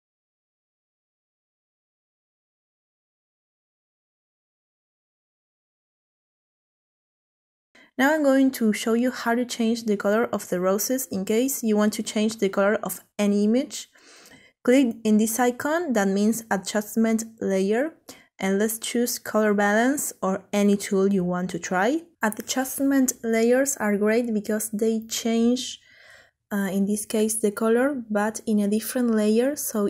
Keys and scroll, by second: 0.0-4.2 typing, 5.6 Return.